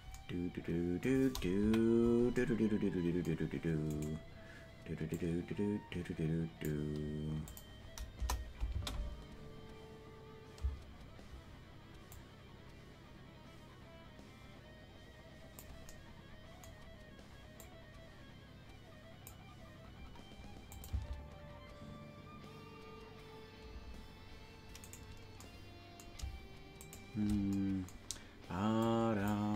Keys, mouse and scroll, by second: 1.6 KP_Decimal, 4.0-5.1 right drag, 5.1-6.7 drag, 7.5 click, 8.1 KP_0, 8.7 space, 10.6 space, 12.1-15.6 drag, 17.5-19.3 drag, 20.7-22.1 drag, 20.9 space, 23.7 space, 24.9 right click, 26.9 shift+right click, 28.8 click.